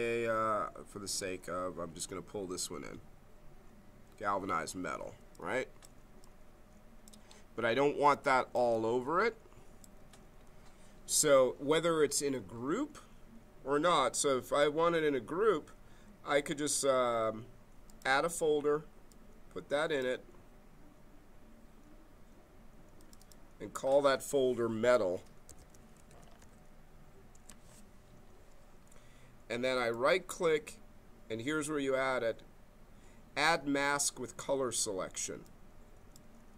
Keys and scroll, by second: 25.2-26.8 typing, 27.3 Return.